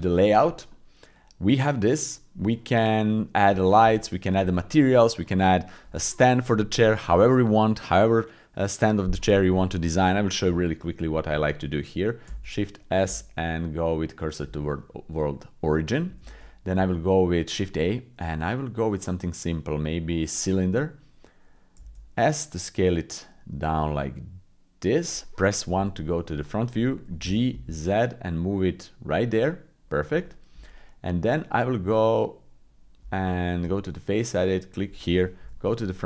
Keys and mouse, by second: 0.7-2.4 drag, 3.5 shift+middle click, 4.0 middle click, 10.5 KP_7, 12.2 shift+s, 13.1 shift+s, 16.2 shift+a, 21.8 s, 25.7 KP_1, 27.2 g, 30.2 shift+click, 31.9 middle click, 33.0 Tab, 35.4 KP_1.